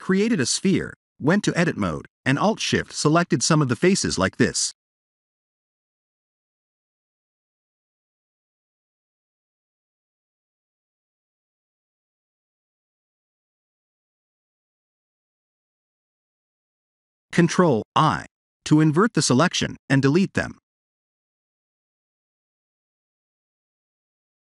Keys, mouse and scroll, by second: 0.5 3, 1.2 middle click, 2.4 KP_7, 5.5 alt+click, 6.9 alt+shift+click, 8.0 alt+shift+click, 9.2 shift+click, 9.8 shift+click, 13.0 ctrl+KP_7, 15.2 shift+click, 15.7 shift+click, 16.4 shift+click, 17.9 ctrl+i, 19.1 x, 22.8 alt+click, 23.8 shift+click.